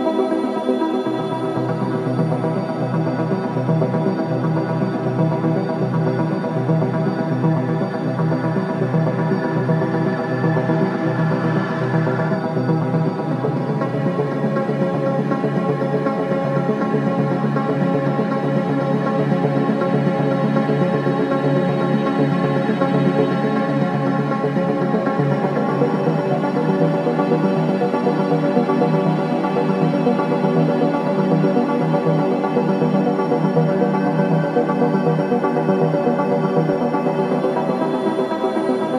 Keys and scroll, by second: 13.5 ctrl+g, 23.7 ctrl+t, 30.4 ctrl+t.